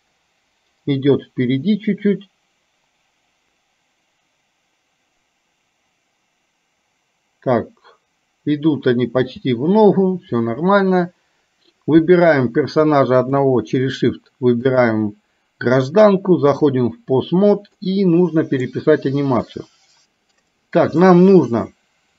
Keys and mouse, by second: 9.4 space, 13.3 shift+click, 14.8-16.9 drag, 17.8-18.8 middle drag, 20.4 click, 21.1-22.1 middle drag.